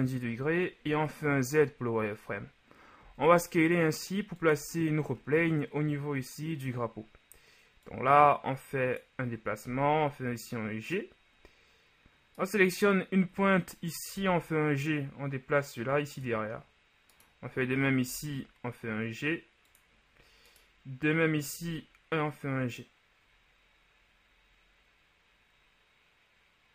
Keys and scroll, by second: 0.9 z, 3.0 s, 9.8 g, 14.3 g, 18.2 g.